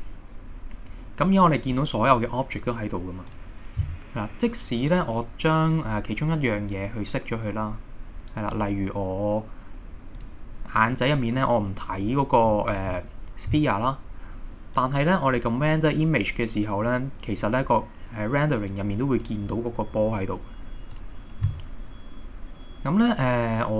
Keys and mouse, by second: 10.2 click, 14.8-15.9 drag.